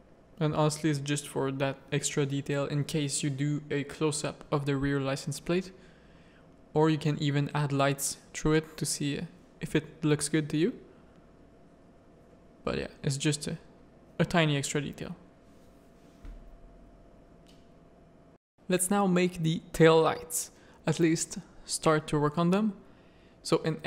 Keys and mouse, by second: 0.7 middle click, 1.5 middle click, 2.3 middle click, 3.0 shift+middle click, 5.3 middle click, 6.0 middle click, 6.6 middle click, 8.0 middle click, 9.3 middle click, 10.1 shift+middle click, 11.1 middle click, 12.9 z, 13.3 middle click, 13.7 z, 14.0-15.5 middle drag, 15.8-17.0 middle drag, 17.0 z, 17.3 z, 17.7 middle click, 19.4 middle click, 21.2 click, 21.6 z, 22.1 shift+middle click, 22.5 middle click, 22.9 Tab.